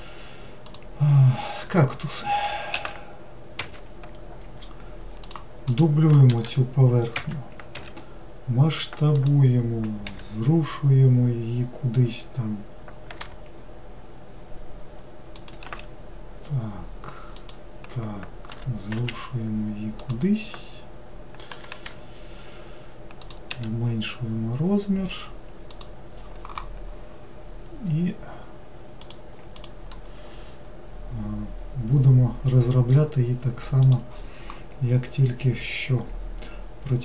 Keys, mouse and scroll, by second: 0.7 click, 2.8 s, 5.3 click, 5.7 click, 6.4 shift+d, 7.8 s, 10.1 g, 15.7 s, 18.6 g, 21.5 g, 23.5 s, 36.1-36.9 scroll up 2.